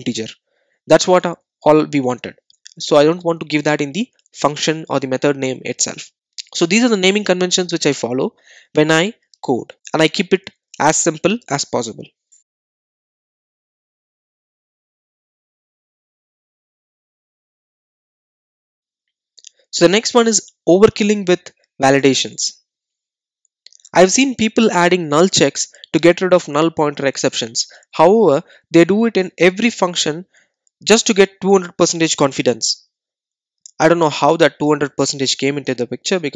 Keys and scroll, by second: 19.0 super+z.